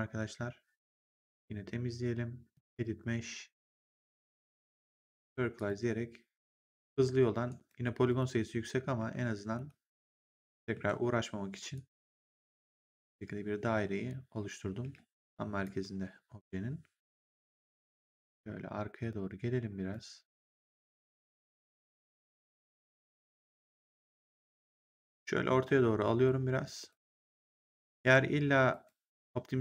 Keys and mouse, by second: 1.2 click, 2.4 click, 5.5 click, 6.5 right click, 8.0 click, 8.9 r, 9.4 ctrl+1, 10.0 w, 10.6 r, 11.6 click, 14.7 w, 15.5 click, 19.8 click, 24.4 click, 26.1 click, 27.9 ctrl+1, 28.6 right click.